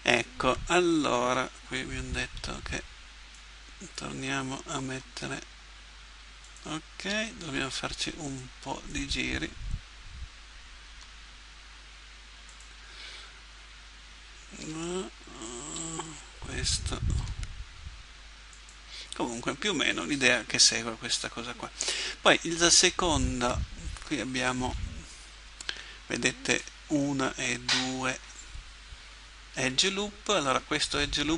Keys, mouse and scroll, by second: 2.3 b, 4.9 g, 7.1 a, 7.5 b, 10.9 g, 14.6 a, 15.7 b, 17.2 g.